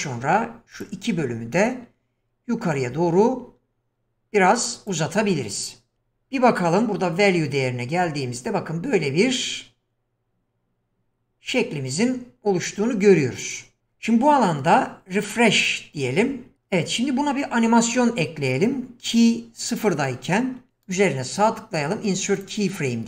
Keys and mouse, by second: 2.8-5.0 drag, 5.9 Tab, 7.3-13.8 drag, 20.9 right click.